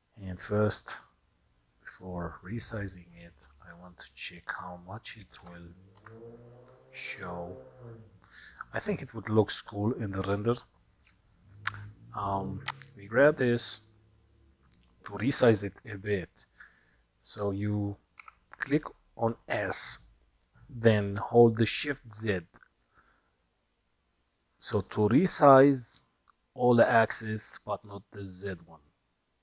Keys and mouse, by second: 1.8 click, 3.5-8.7 drag, 12.7 click, 18.4 s.